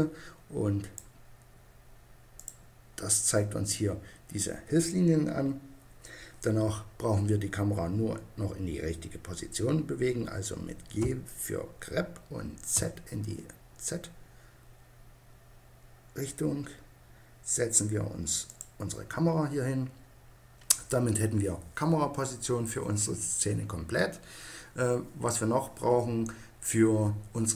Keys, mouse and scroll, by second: 11.0 g, 18.6-20.4 drag.